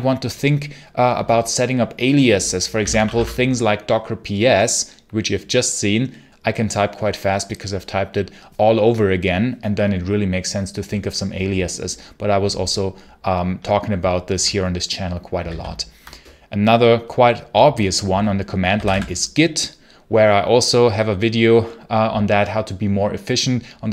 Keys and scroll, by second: 2.4-3.4 typing, 15.2 ctrl+c, 15.4 ctrl+l, 18.4-19.3 typing.